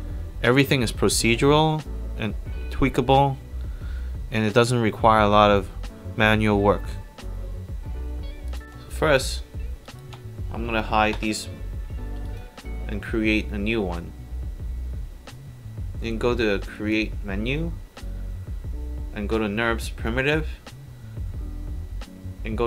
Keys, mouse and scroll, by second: 0.5 alt+click, 1.3 alt+click, 1.9 click, 2.4 click, 2.8-3.2 alt+drag, 7.7 click, 9.9 shift+click, 11.2 click, 12.3 shift+click, 16.8 click.